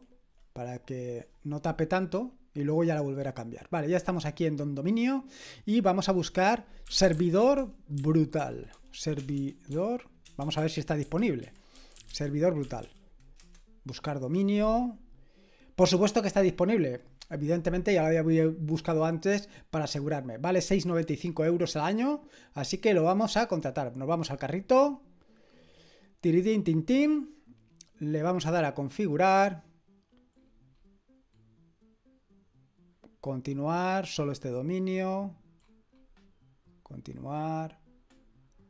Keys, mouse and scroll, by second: 5.8 click, 6.6-13.3 typing, 13.4 Return, 22.0 click, 24.5 click, 28.0 click, 30.4-31.5 scroll down 2, 31.5 scroll down 1, 31.6-32.0 scroll up 1, 32.0-32.3 scroll down 1, 34.2 click, 35.6-36.9 scroll down 1, 36.9 click, 37.9-38.6 scroll down 1.